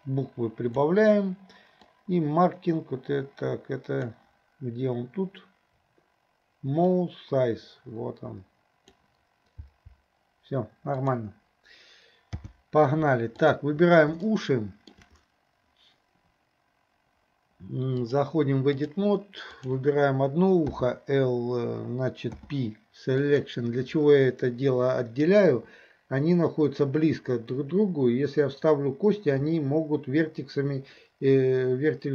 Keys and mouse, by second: 0.0-9.0 drag, 9.6 g, 11.1 click, 12.4 n, 13.5 click, 14.3-14.9 middle drag, 18.0-19.0 drag, 19.5 click, 20.8 l, 22.4 p.